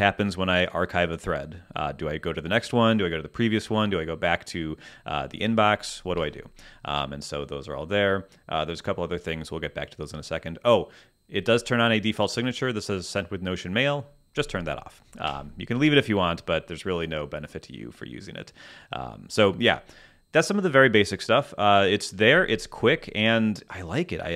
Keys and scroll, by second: 6.2 Escape, 15.3 Escape.